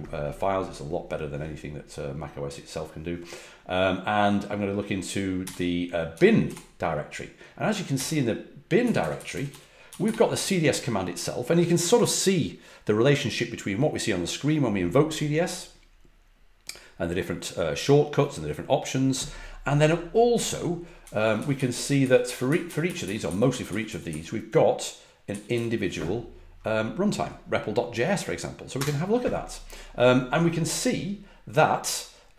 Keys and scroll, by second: 5.4-6.4 typing, 7.9-10.5 typing, 20.7-25.3 typing, 28.7 typing.